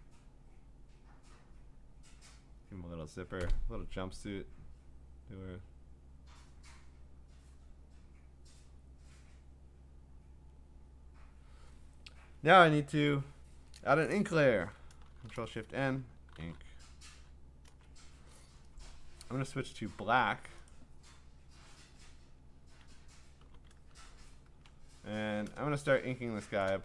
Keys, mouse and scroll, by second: 0.9 click, 1.8 click, 3.2 click, 4.6 click, 7.7 click, 10.2 click, 11.4 click, 14.8 click, 15.1 ctrl+shift+n, 16.1-17.0 typing, 17.7 Return, 18.9-19.6 typing, 20.7 right click, 22.6 Escape, 23.4 b, 24.0 d, 24.6-25.3 ctrl+scroll, 26.2 ctrl+middle click, 26.7 click.